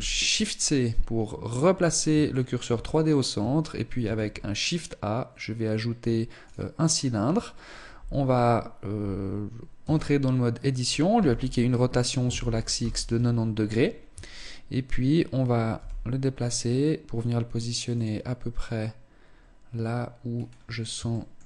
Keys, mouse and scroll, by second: 0.4-1.6 scroll up 4, 1.8 shift+middle click, 2.3-2.7 scroll up 1, 3.5 shift+a, 9.4 Tab, 10.6 r, 13.4-14.0 scroll up 2, 14.0 Tab, 14.0-15.2 scroll up 1, 15.2 g, 17.5 click, 19.8-20.8 scroll up 1, 20.8 shift+middle click, 20.8-21.4 scroll up 1, 20.8 g.